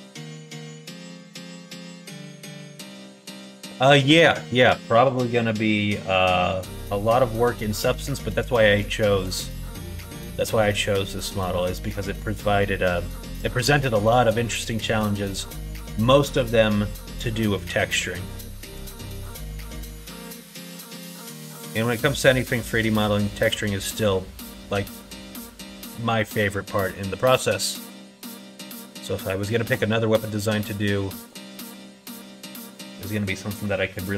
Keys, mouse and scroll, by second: 1.3 middle click, 2.0 shift+middle click, 2.6 middle click, 3.3 shift+middle click, 7.1 middle click, 8.0 shift+middle click, 9.0 shift+middle click, 9.6 middle click, 10.7 middle click, 11.5 middle click, 14.1 middle click, 15.3 middle click, 18.7 KP_1, 19.1 KP_6, 19.6 KP_3, 21.6 alt+z, 22.6-23.9 drag, 27.5-28.7 drag, 29.6 x, 32.8 click.